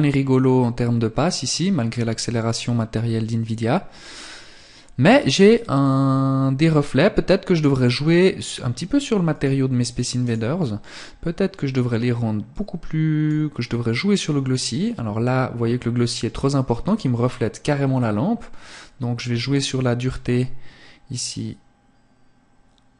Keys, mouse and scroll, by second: 8.3 click, 9.2 right click, 11.5 click, 17.6 click.